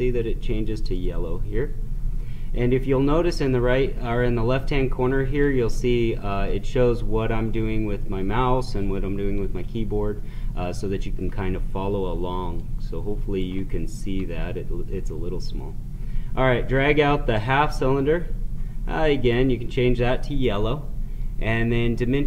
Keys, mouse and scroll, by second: 0.9 click, 5.5 click, 12.5-19.2 drag.